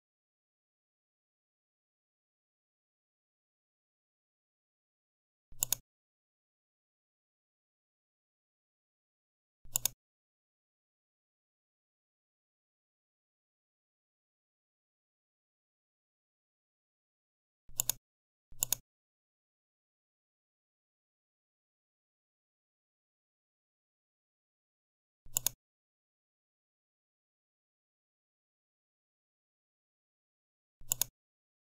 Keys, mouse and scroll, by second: 0.3 BackSpace, 0.6 BackSpace, 0.7 BackSpace, 0.9 5, 1.4 Return, 5.5 click, 9.6 click, 17.6 click, 20.7-21.4 typing, 21.9 Return, 25.2 click, 26.5-27.7 typing, 27.8 Return, 30.8 click.